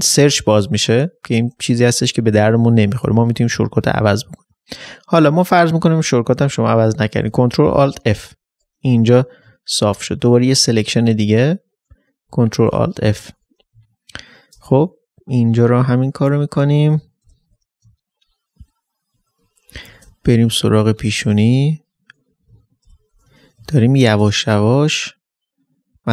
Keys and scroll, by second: 0.2 ctrl+z, 7.3 ctrl+f, 8.1 ctrl+alt+f, 8.9 ctrl+alt+d, 9.5 ctrl+alt+space, 12.7 ctrl+alt+f, 13.3 ctrl+alt+d, 13.8 ctrl+alt+space, 17.8 ctrl+alt+space, 19.4 typing, 22.5 typing, 22.9 ctrl+alt+f, 23.6 space.